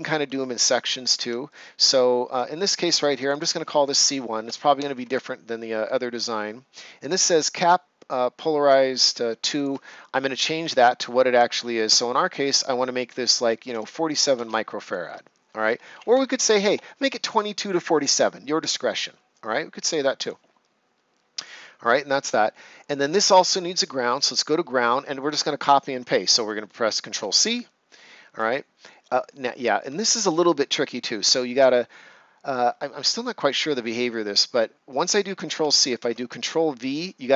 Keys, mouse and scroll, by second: 0.5 right click, 1.4 click, 1.8 ctrl+scroll up 1, 3.1 click, 4.3 1, 4.4 BackSpace, 4.9 1, 5.0 Return, 6.1 click, 9.4 click, 13.4-15.0 typing, 16.1 typing, 18.6 Return, 20.2 click, 22.8 ctrl+scroll down 1, 23.1 right click, 24.1 click, 26.9 click, 27.1 ctrl+c, 27.8 right click, 29.5-29.8 ctrl+scroll up 1, 35.6-35.9 ctrl+scroll up 1, 35.9 ctrl+v.